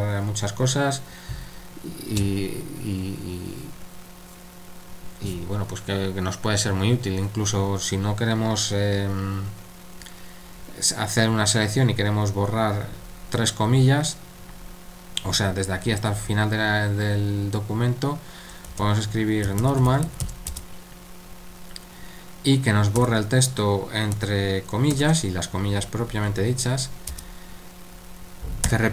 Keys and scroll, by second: 18.7-20.7 typing, 23.0 typing, 24.2-24.9 typing, 28.6 typing.